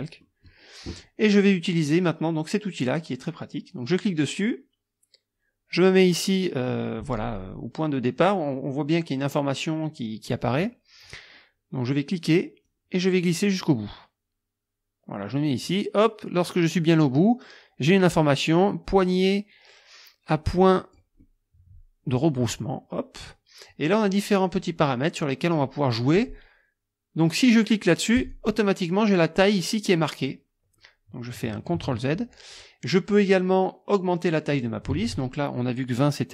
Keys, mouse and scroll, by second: 0.2 click, 3.9 click, 12.7-21.1 drag, 21.2 scroll up 1, 21.3-22.3 drag, 28.2 click, 31.7 ctrl+z, 34.5 click, 35.0 ctrl+a.